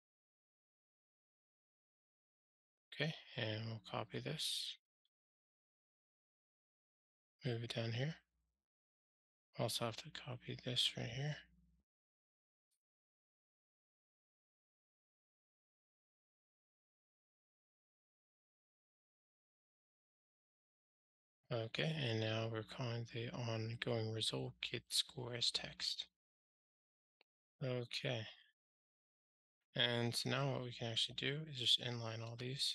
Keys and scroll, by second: 0.0 alt+Return, 0.8 alt+super+l, 5.0 super+c, 7.5 super+v, 11.2 super+c, 16.0 super+v, 19.1 Return, 22.9 ctrl+alt+shift+r, 32.6 alt+super+n.